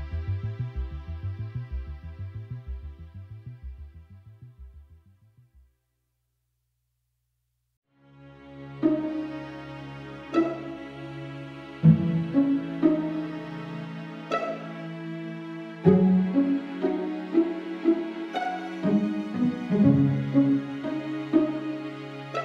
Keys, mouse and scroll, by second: 0.0 KP_1, 0.3 scroll up 1, 0.4 shift+middle click, 0.7-1.1 scroll down 1, 1.1 z, 1.3-2.9 scroll up 3, 1.4 shift+middle click, 1.7 shift+middle click, 2.9 b, 3.2-4.2 shift+right drag, 4.2 b, 4.5 shift+right click, 4.8 shift+middle click, 5.6 b, 5.7 shift+right click, 6.1 shift+middle click, 6.9 b, 7.1-7.6 shift+right drag, 7.6 KP_1, 8.4 shift+middle click, 9.3 b, 9.4 shift+right click, 9.5-10.5 shift+middle drag, 10.5 b, 10.7 shift+right click, 10.8 shift+middle click, 11.5 shift+right click, 12.1 scroll down 3, 12.1 middle click, 12.6 KP_0, 13.3-16.5 drag, 16.5 z, 16.7 Tab, 17.2 Tab, 17.3-17.7 scroll up 4, 17.7 right click, 17.8 middle click, 18.2 middle click, 18.7 right click, 19.1 middle click, 19.7 right click, 20.2-22.4 typing, 21.2 Tab, 21.3-21.7 right drag, 22.1 right click.